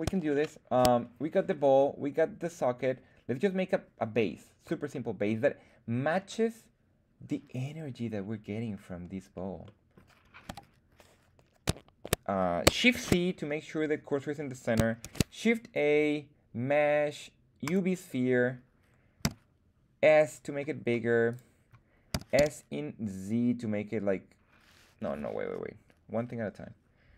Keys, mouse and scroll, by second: 0.2-0.7 shift+middle drag, 1.4-1.7 middle drag, 4.9 middle click, 9.6-9.9 middle drag, 10.4 KP_1, 12.8 shift+c, 15.0 shift+a, 19.2 s, 21.2 click, 22.0 s, 22.3 z, 24.9 Escape.